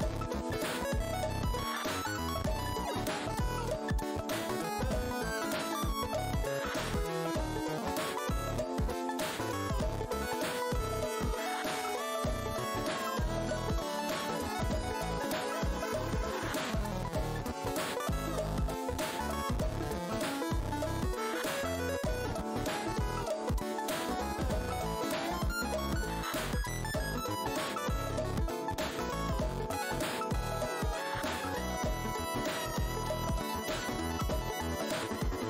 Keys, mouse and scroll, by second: 2.2 alt+click, 2.6-3.5 typing, 3.8 click, 5.1 shift+d, 6.1 click, 6.3-6.6 scroll down 1, 6.9 w, 7.6 alt+click, 9.4-9.7 alt+scroll down 1, 10.0 alt+click, 10.5 scroll up 2, 11.2 alt+click, 11.4-12.0 alt+scroll up 2, 12.0-13.5 typing, 13.0 scroll down 1, 13.5-13.9 scroll down 1, 14.1 click, 15.9 scroll down 1, 16.3 w, 18.2 click, 19.7 space, 20.4 click, 20.6 alt+scroll down 1, 21.1-21.5 alt+scroll up 1, 22.5 w, 23.4 click, 24.4 shift+right click, 25.4 click, 26.3 click, 28.4 right click, 28.7 click, 29.0 r, 29.9 click, 33.2 click, 33.8 w, 34.3 scroll.